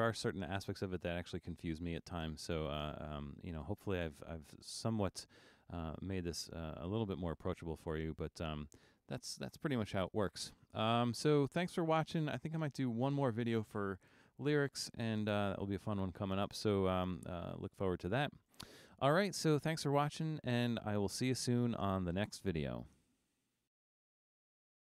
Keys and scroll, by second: 0.4 super+=.